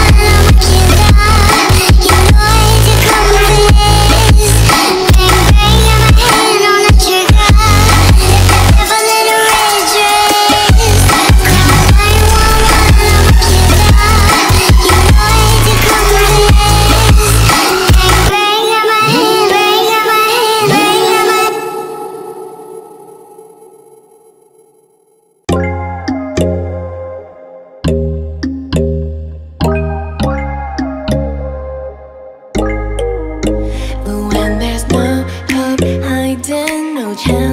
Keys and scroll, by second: 1.8-5.5 typing, 1.9 Return, 2.3 Return, 4.5 F3, 7.0 c, 17.3 Escape, 20.5 F4, 25.5 2, 26.0 F4, 28.4 shift+r, 29.1 Return, 31.6 e, 32.2 a, 34.3 F4, 36.6-37.5 typing.